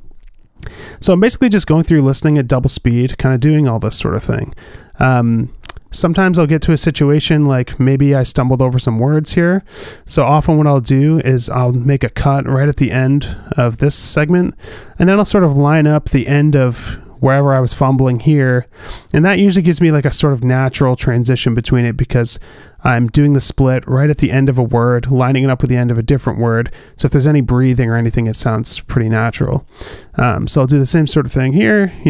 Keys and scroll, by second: 13.5 alt+b, 31.8 alt+b.